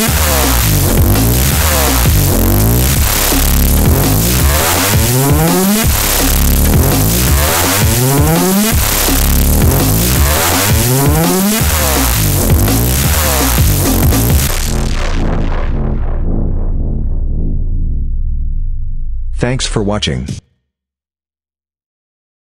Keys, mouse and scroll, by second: 10.5 click, 20.1 space, 21.1 click.